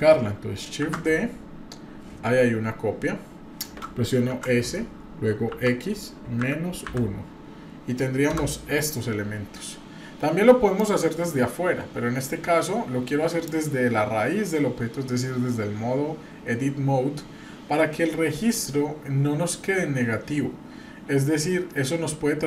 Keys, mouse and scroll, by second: 0.8 shift+d, 10.8-13.4 drag, 20.6-21.0 scroll up 2, 21.0-21.3 scroll down 2.